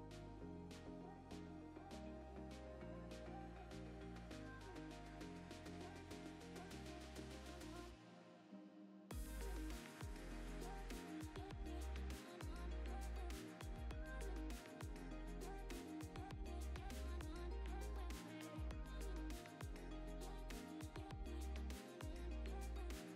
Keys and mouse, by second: 0.0 ctrl+Tab, 0.0 click, 0.7 click, 1.2 click, 1.3 click, 2.2 drag, 2.7 drag, 3.5 drag, 3.9 click, 4.8 click, 5.0 drag, 5.8 drag, 6.2 click, 7.3 KP_0, 8.0 click, 8.9 click, 9.1 click, 9.9-10.7 typing, 10.5 drag, 10.9 click, 11.5 click, 12.3-13.7 drag, 13.4-15.0 typing, 15.7 click, 16.6 q, 17.4 click, 17.6-22.4 typing, 18.5 Tab, 19.1 click, 20.0 click, 21.0 click, 21.1 Tab, 22.9 click.